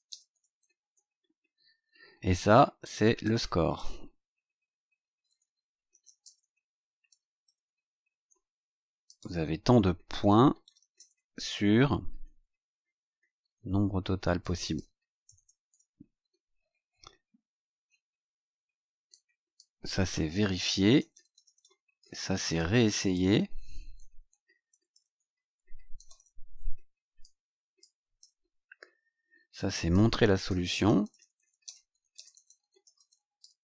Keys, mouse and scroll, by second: 0.0-1.1 typing, 1.9 scroll down 2, 3.2 click, 4.8-8.1 typing, 9.0 click, 9.8-12.0 typing, 12.2 Delete, 14.3 click, 15.2 BackSpace, 15.6 shift+;, 16.6 scroll down 2, 19.0 click, 20.3-22.0 typing, 22.5 click, 23.9-26.7 typing, 27.1 click, 28.1 shift+r, 28.7 scroll down 2, 29.5 click, 30.2-33.6 typing.